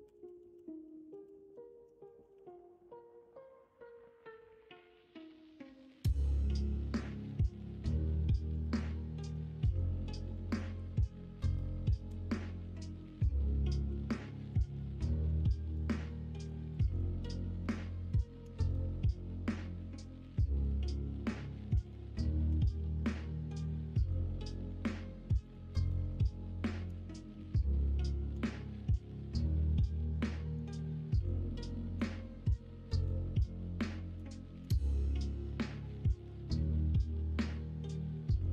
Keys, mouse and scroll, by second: 2.3 ctrl+r, 8.0 ctrl+r, 9.1 alt+z, 10.7 2, 12.0 /, 12.7 middle click, 13.8 2, 14.7 middle click, 18.4 f, 18.8 middle click, 22.4 f, 22.6 middle click, 23.8 middle click, 24.6 middle click, 25.2 middle click, 26.8 g, 28.3 f, 28.6 middle click, 29.7 middle click, 31.9 f, 32.1 middle click, 34.6 f, 34.9 middle click, 36.8 middle click, 37.5 2.